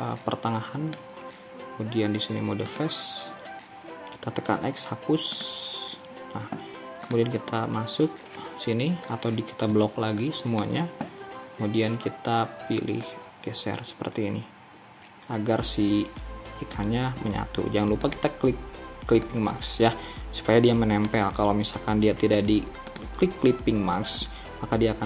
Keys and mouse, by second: 4.6 x, 9.8 b, 20.3-21.6 drag, 21.6 ctrl+z, 24.5-25.0 drag.